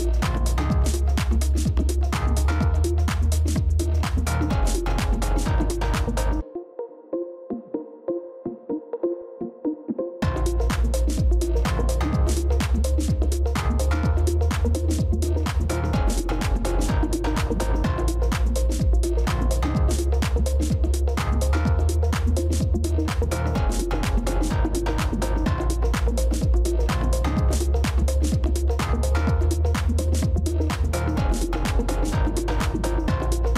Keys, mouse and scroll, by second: 1.5 alt+click, 7.4 ctrl+c, 10.5 ctrl+f, 12.5 shift+click, 25.1-27.3 scroll up 1.